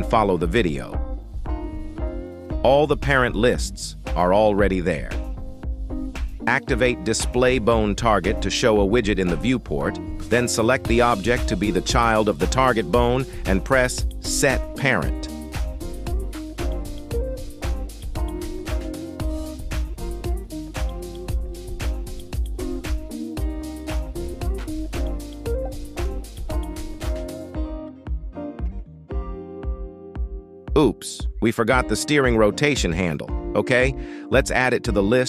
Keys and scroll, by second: 3.7 ctrl+Tab, 5.1 z, 8.8 g, 9.4 Escape, 13.1 g, 13.6 Escape, 18.3 g, 18.8 Escape, 21.3 g, 22.0 Escape, 25.0 g, 25.9 Escape, 30.6 ctrl+Tab, 34.9 r.